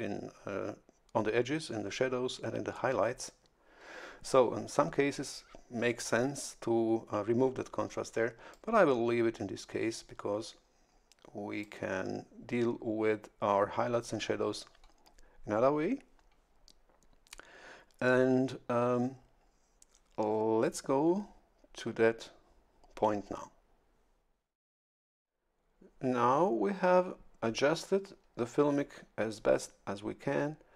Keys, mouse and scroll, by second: 8.5-11.9 drag.